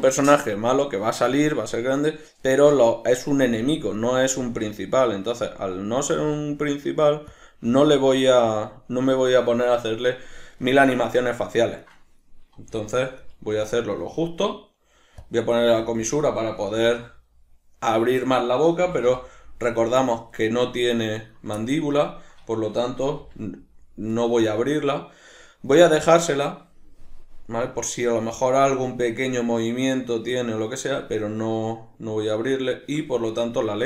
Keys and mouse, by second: 2.5 right click, 3.5 g, 4.1 right click, 4.5 g, 5.5 click, 6.1 g, 7.4 click, 7.7 g, 8.6-10.7 drag, 10.7-11.9 shift+middle drag, 11.9 right click, 12.6 g, 13.3 right click, 13.5 g, 15.2 click, 15.6 g, 16.1 click, 16.8 alt+q, 18.8 g, 19.8 click, 20.0-21.3 shift+middle drag, 21.3 right click, 21.6-24.3 ctrl+middle drag, 23.3 r, 24.3 right click, 32.6 right click, 33.3 shift+right click.